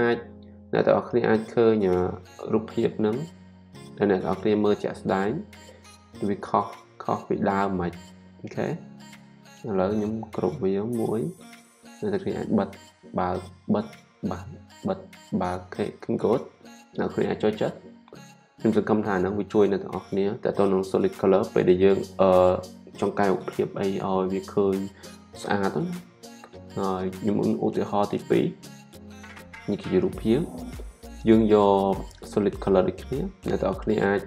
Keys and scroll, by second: 10.4 super+g.